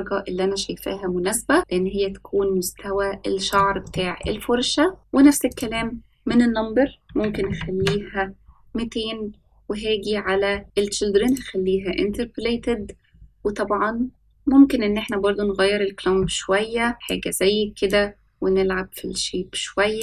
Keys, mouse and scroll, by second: 3.9-4.2 shift+middle drag, 4.5-5.4 scroll up 2, 5.4-8.9 drag, 7.4 KP_0, 8.9-10.2 scroll down 2, 10.3-10.6 scroll down 3, 11.2 click, 11.2 scroll down 2, 12.5-13.1 scroll down 2, 15.0-17.0 drag, 17.8-20.0 drag.